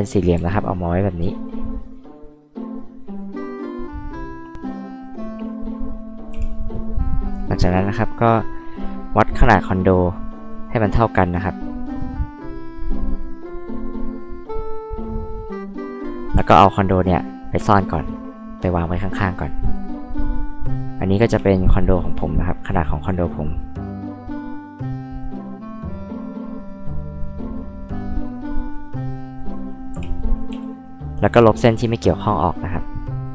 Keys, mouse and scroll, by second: 0.3 r, 2.9 click, 4.5 click, 7.2 click, 8.2 click, 8.6 click, 10.6 click, 12.6 click, 15.9-16.4 scroll up 4, 16.3 m, 17.1 click, 21.3 r, 23.0 click, 24.6 click, 25.9 click, 27.1 click, 28.5 click, 29.5 click, 29.9 h, 30.5 e, 32.5 click, 33.1 click.